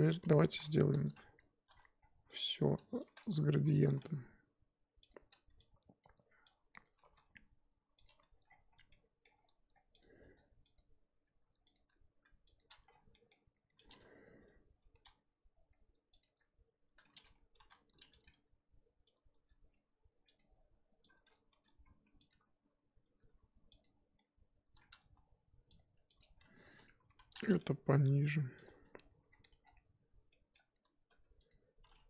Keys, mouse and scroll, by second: 0.5 s, 1.7 a, 2.5 click, 3.8 s, 6.0 click, 6.8 click, 7.0 g, 8.2 Tab, 8.4-8.9 scroll down 4, 8.9-9.4 middle drag, 9.4 scroll up 3, 10.0 click, 10.2 Tab, 10.7 click, 11.7 alt+click, 12.6 shift+click, 14.9 g, 16.2 Tab, 16.8 Tab, 17.6 g, 18.3 Tab, 19.3 Tab, 20.4 alt+click, 21.5 g, 22.3 Tab, 23.0 Tab, 23.8 alt+click, 25.0 a, 26.2 click, 27.1 l, 27.7 g, 28.6 Tab, 29.3-30.0 scroll down 6, 29.4 click, 30.3 scroll down 3, 30.3-30.6 middle drag, 30.6-31.1 scroll up 2, 31.1 Tab, 31.5 click.